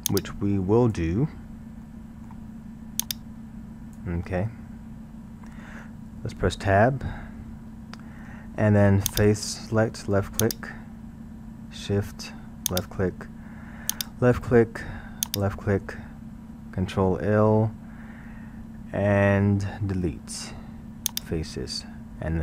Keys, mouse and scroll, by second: 0.1 click, 1.9-3.0 middle drag, 3.0 click, 5.3-7.0 middle drag, 7.0 Tab, 7.5-9.1 scroll, 9.1 click, 10.4 click, 12.7 shift+click, 13.9 shift+click, 15.3 shift+click, 16.9 ctrl+l, 20.4 Delete.